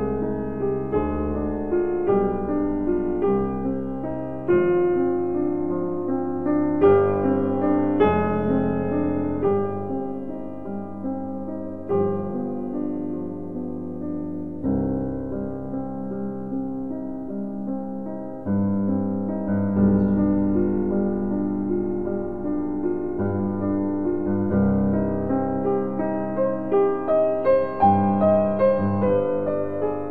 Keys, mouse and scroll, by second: 1.2 click, 1.3 click, 3.5 shift+Num_Lock, 3.5 shift+click, 12.8-15.5 middle drag, 15.4 click, 18.3-22.6 middle drag, 22.6 shift+click, 28.7-30.1 middle drag.